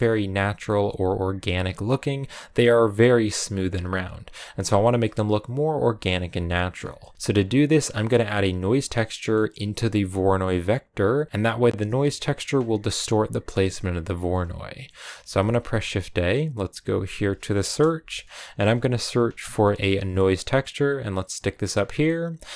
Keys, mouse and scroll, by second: 3.5-4.2 scroll down 1, 4.2-4.9 scroll up 2, 4.9-7.1 ctrl+middle drag, 7.1 scroll down 2, 11.3-20.4 drag.